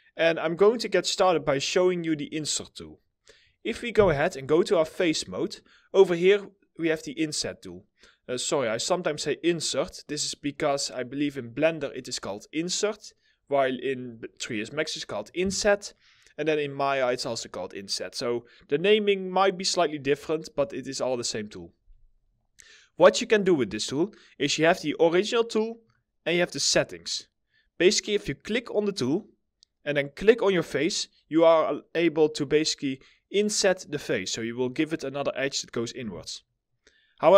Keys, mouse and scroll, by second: 0.3-0.8 scroll up 1, 0.8 middle click, 3.4 4, 35.6 w.